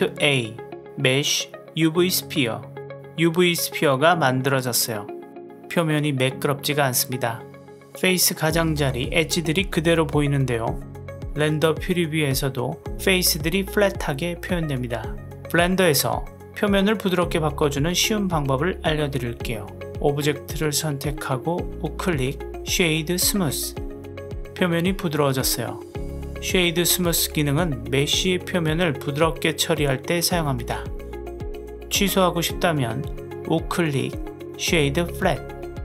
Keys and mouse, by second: 0.2 shift+a, 4.7 KP_Decimal, 6.0-8.3 middle drag, 12.1-15.2 middle drag, 16.7 click, 21.6 right click, 24.7-25.5 middle drag, 26.2 click, 27.7-29.8 middle drag, 30.4 click, 33.4-35.8 right drag.